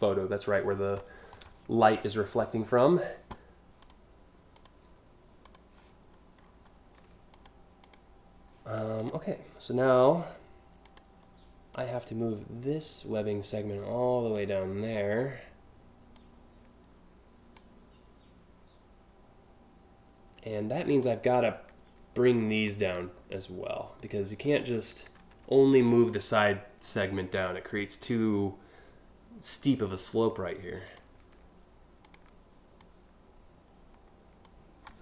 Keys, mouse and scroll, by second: 3.4 click, 4.1 click, 5.0 click, 6.1 scroll up 3, 6.9 click, 7.4 click, 8.6 click, 10.4 click, 11.3-14.0 drag, 15.7-17.2 drag, 20.5 click, 22.1 click, 22.5-24.1 drag, 30.5 click, 31.6 shift+click.